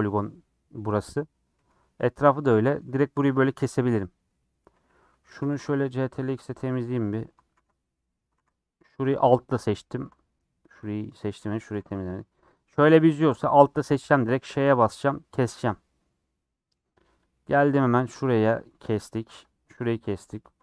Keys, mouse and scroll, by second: 1.5-4.7 middle drag, 4.7 2, 5.3 click, 5.5 ctrl+x, 5.9-8.0 middle drag, 8.0 click, 8.3 ctrl+x, 8.8 3, 9.2 alt+click, 10.0 middle click, 10.4-11.2 scroll down 1, 11.2 2, 11.4 click, 11.7 ctrl+x, 12.2 3, 13.5 alt+click, 14.5 ;, 15.4-17.2 middle drag, 17.2 click, 17.6 click, 17.9 ctrl+click, 18.1 middle click, 18.6 middle click, 19.3 click, 19.8 middle click, 20.2 click.